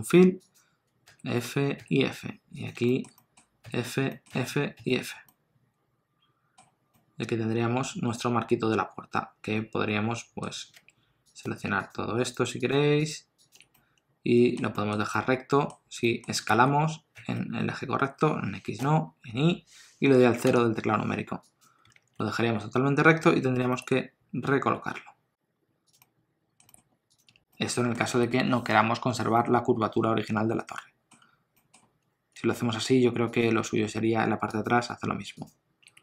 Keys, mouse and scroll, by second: 0.4 click, 1.0 f, 1.8 f, 2.5 click, 2.8 shift+middle click, 3.1 middle click, 3.6 f, 4.1 middle click, 4.3 f, 4.8 f, 5.3 middle click, 6.5-6.9 scroll down 1, 6.9 middle click, 10.8 3, 11.2 click, 11.8 shift+click, 13.7 middle click, 14.7 shift+middle click, 15.1 middle click, 16.4 s, 21.9 alt+z, 23.2 alt+z, 23.6 g, 26.0 middle click, 26.6 g, 27.2 Tab, 27.5 middle click, 28.1 alt+a, 29.4 middle click, 31.2-32.4 scroll up 2, 31.5 middle click, 32.4 Tab, 33.3 click, 33.6 Tab, 34.0 3, 34.5 click, 35.4 shift+click.